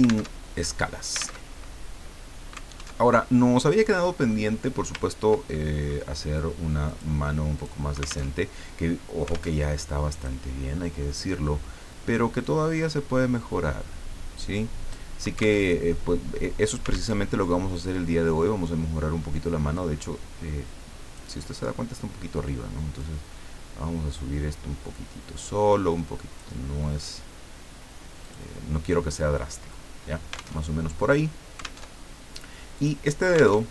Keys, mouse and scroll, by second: 0.3 alt+Tab, 1.4 alt+Tab, 3.0 alt+Tab, 4.1-4.5 scroll up 2, 4.6 scroll down 2, 5.0 ctrl+scroll up 2, 5.5 ctrl+middle click, 6.8 click, 7.5 click, 8.4 alt+Tab, 9.5 alt+Tab, 10.1 click, 12.4-15.2 drag, 15.7 alt+Tab, 17.1 alt+Tab, 19.7-21.6 drag, 23.0-26.5 drag, 28.2 click, 30.6 alt+Tab, 31.8 alt+Tab, 32.8 click, 33.6 alt+Tab.